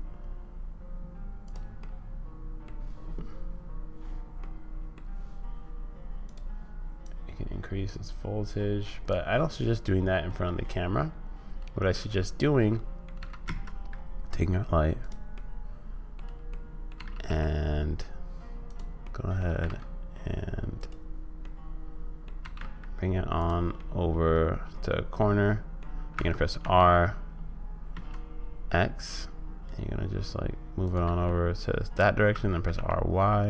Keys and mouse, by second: 1.8 middle click, 4.5 middle click, 6.3 click, 7.1-9.1 drag, 9.8-13.1 drag, 13.1 g, 15.3 click, 16.6 click, 17.0 g, 19.1 click, 19.5 g, 21.6 click, 23.8-25.8 drag, 23.8 g, 26.1 r, 31.3 click, 32.3 r.